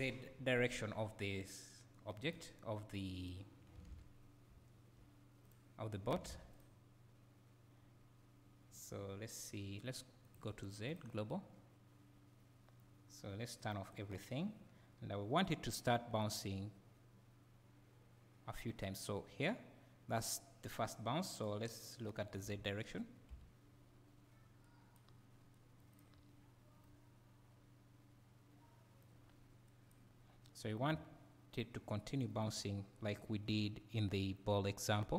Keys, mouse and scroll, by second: 0.8 s, 2.2-3.9 drag, 3.9 ctrl+z, 4.2-4.5 scroll up 1, 4.5 `, 5.4-6.6 drag, 6.3 ctrl+z, 9.7-10.8 scroll down 2, 10.8-15.9 drag, 15.9-21.4 right drag, 21.4 click, 21.9 click, 26.0-32.5 right drag.